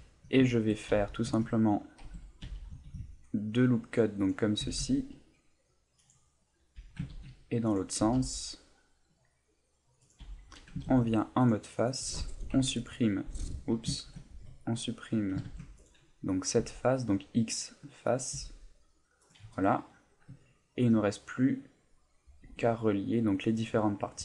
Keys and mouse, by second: 0.4 shift+middle click, 0.9 a, 1.8 right click, 2.0 Tab, 2.8 ctrl+r, 4.3 click, 4.6 s, 6.1 click, 6.8 a, 7.1 ctrl+r, 7.8 click, 8.1 s, 10.1 click, 10.2 a, 10.8 ctrl+Tab, 11.7 right click, 12.5 Delete, 14.0 ctrl+z, 15.4 ctrl+Tab, 16.3 right click, 16.6 x, 18.0 right click, 20.5 ctrl+middle click, 21.0 middle click, 22.4 Tab, 22.7 middle click.